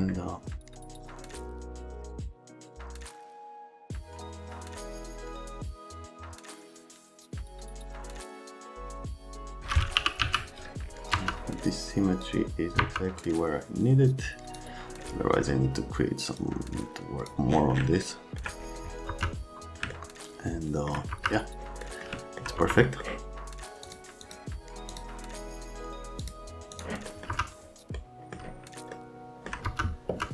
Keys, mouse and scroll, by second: 0.8 F3, 3.3 F3, 4.0 click, 4.2 scroll up 2, 5.4 click, 5.6 click, 5.7 click, 6.1 click, 6.3 scroll, 6.5 F3, 6.6 alt+middle click, 8.2 F3, 8.3 F3, 10.0 e, 10.2 z, 11.1 F3, 19.1 F3, 19.9 alt+middle click, 21.1 F1, 21.8 middle click, 22.6 F3, 22.8 right click, 23.9 click, 24.2 click, 24.9 click, 26.2 click, 26.7 click, 27.3 F3, 28.9 alt+middle click, 29.7 F3, 30.1 F3.